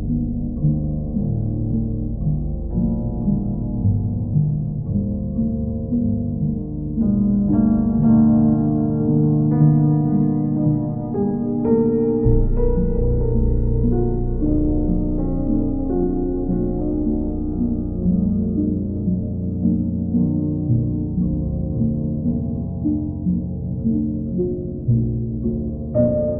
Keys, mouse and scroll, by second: 1.0-2.0 drag, 3.2-4.2 drag, 7.0-8.1 drag, 8.3-9.4 right drag, 15.1-16.2 drag, 18.9-20.0 drag, 25.5 click.